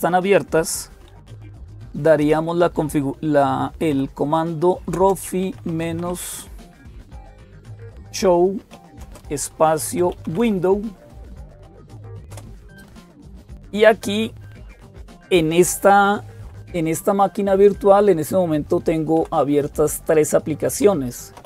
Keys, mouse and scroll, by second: 0.0-21.4 typing, 12.1 Return, 19.0 Down, 19.2 Down, 20.6 Up, 21.2 Up.